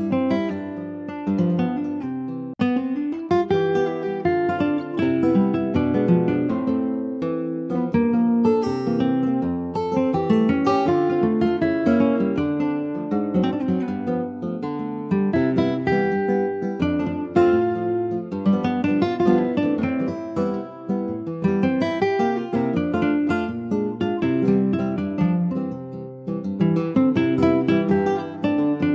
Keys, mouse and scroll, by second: 0.0 alt+z, 0.3-0.9 scroll up 2, 1.4 alt+x, 3.4 Tab, 4.3 click, 5.2 shift+middle click, 6.1 click, 6.7-7.6 scroll down 3, 7.6 click, 9.2 Tab, 9.5 click, 9.9 alt+z, 10.4 middle click, 10.8 ctrl+s, 10.9 click, 11.3 middle click, 11.9 ctrl+s, 12.1 shift+middle click, 12.4-13.0 scroll up 4, 12.7 middle click, 13.0 ctrl+s, 13.2 click, 13.6 shift+middle click, 13.9 Tab, 14.2 middle click, 14.4-15.1 scroll up 5, 15.1 middle click, 15.6 3, 15.8 click, 16.2 shift+middle click, 16.4-17.0 shift+scroll up 1, 17.0 shift+click, 17.6 shift+click, 18.2 middle click, 18.7 ctrl+s, 18.8 click, 19.3 click, 19.7 shift+click, 20.2 shift+click, 20.8 middle click, 21.2 ctrl+s, 21.7-23.1 middle drag, 23.1 shift+d, 24.3 middle click, 25.0 shift+scroll up 1, 25.1 middle click, 25.5 s, 28.3 middle click.